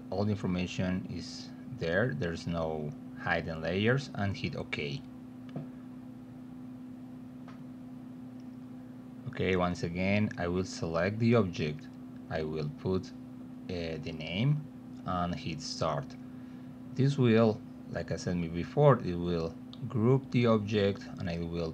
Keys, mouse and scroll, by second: 0.3 click, 0.7 click, 1.4 click, 4.2 click, 9.6-10.6 drag, 12.0 click, 12.5 click, 13.8-16.9 typing, 19.1 click.